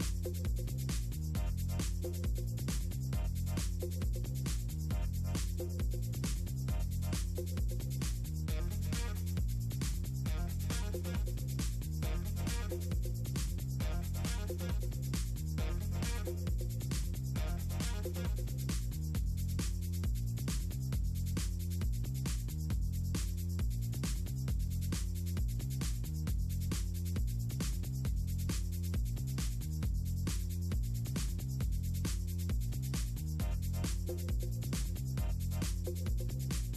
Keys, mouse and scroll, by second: 0.4 Delete, 0.6 middle click, 1.9 middle click, 2.3 middle click, 3.0 ctrl+click, 4.3 shift+click, 4.5 right click, 4.7 scroll up 2, 4.7 click, 4.9 click, 6.0 right click, 7.0-7.3 drag, 7.6 click, 7.8 click, 8.1 click, 8.7 click, 9.1 middle click, 9.7 ctrl+click, 10.0 click, 10.8 click, 11.1 middle click, 11.5 ctrl+click, 11.6 middle click, 11.8 click, 12.3 click, 12.7 click, 13.0 click, 13.2 click, 13.4 click, 13.8 click, 14.3 click, 14.7 click, 14.9 click, 15.6 click, 15.9 click, 16.1 click, 16.4 click, 16.7 click, 17.2 click, 17.5 middle click, 17.6 click, 17.9 click, 18.0 click, 18.3 click, 18.6 middle click, 18.7 middle click, 19.0 middle click, 19.3 middle click, 21.1 middle click, 21.6 click, 21.9 middle click, 22.1 click, 22.5 click, 23.0 drag, 23.7 click, 25.8 click, 26.5 space, 26.6 click, 27.1 space, 27.1 click, 28.1 middle drag, 29.0 click, 29.3 Up, 29.8 middle click, 30.3 middle click, 30.5 click, 30.7 middle click, 30.8 click, 31.1 click, 32.5 click, 33.5 middle click, 33.9 click, 34.5 click, 34.8 click, 35.0 middle click, 35.1 click, 35.7 click, 36.0 click, 36.3 middle click.